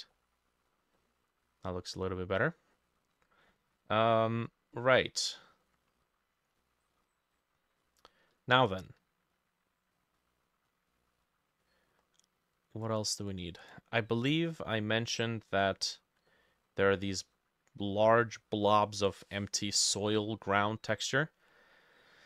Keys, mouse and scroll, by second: 0.2 middle click, 0.7 scroll down 1, 1.0 middle click, 2.0 middle click, 2.4-2.8 scroll up 3, 2.8 middle click, 3.2-4.1 scroll down 10, 4.1 middle click, 4.4-4.8 scroll up 2, 4.8 middle click, 5.7 middle click, 6.6 middle click, 7.0-7.9 scroll up 4, 7.9 middle click, 8.5-10.0 scroll down 1, 10.0 scroll down 1, 10.2 middle click, 11.7 middle click, 13.3 double click, 14.2 middle click, 14.8 middle click, 15.7 middle click, 16.3 middle click, 17.1 middle click, 17.9 middle click, 22.0 middle click.